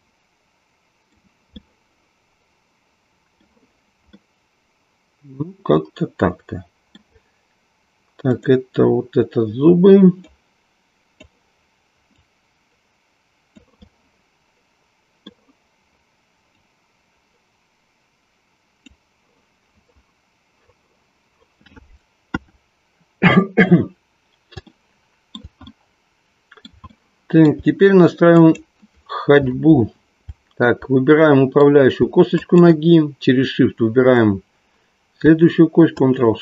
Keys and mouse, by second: 2.1-3.5 middle drag, 4.2-7.0 middle drag, 8.7-9.2 drag, 10.2-11.4 drag, 12.2-13.7 drag, 13.8-16.1 middle drag, 16.5-19.0 drag, 22.4 KP_1, 24.7-28.7 middle drag, 28.7 click, 31.2 middle click, 32.5 shift+click.